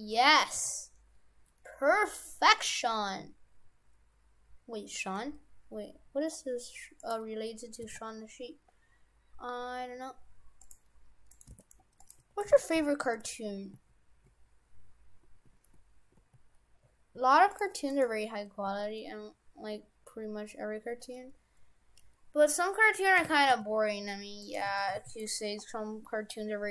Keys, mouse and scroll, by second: 0.6 s, 2.7 g, 7.8 s, 11.4 right click, 11.6 shift+f, 12.2 Tab, 12.6 shift+f, 17.8 Tab, 18.0 right click, 18.7 r, 24.5 right click, 24.8 shift+f, 25.3 Tab.